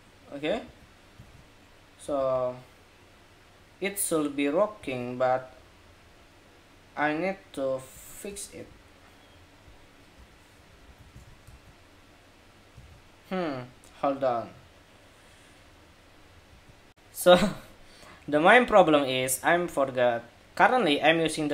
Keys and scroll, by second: 0.4 super+s, 0.9 super+Tab, 1.9 super+r, 4.7 super+Tab, 10.6 super+s, 10.9 super+Tab, 11.2 super+r, 12.6 super+Tab, 16.6 shift+super+2.